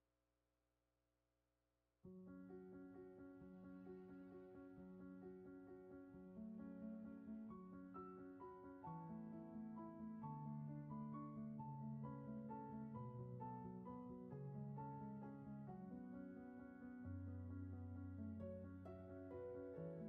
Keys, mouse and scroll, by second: 2.3 ctrl+z, 10.5 ctrl+z, 12.2 ctrl+z.